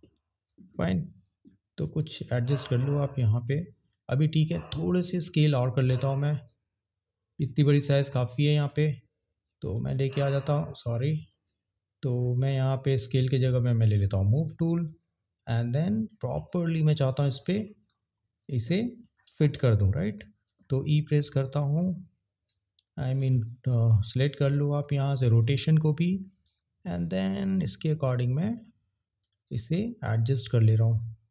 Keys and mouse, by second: 5.1 click, 6.2 click, 8.5 click, 9.7 click, 13.8 click, 14.9 click, 23.2 click, 25.4 click, 26.6 click, 29.2 click, 30.2 click.